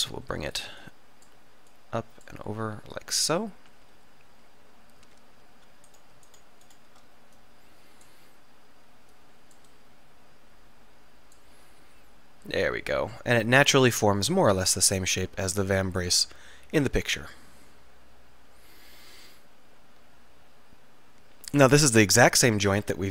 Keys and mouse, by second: 0.9 middle click, 4.7 middle click, 12.6 middle click, 15.7-18.4 middle drag, 18.5 middle click, 21.1-23.0 middle drag, 22.8 click, 23.0 click.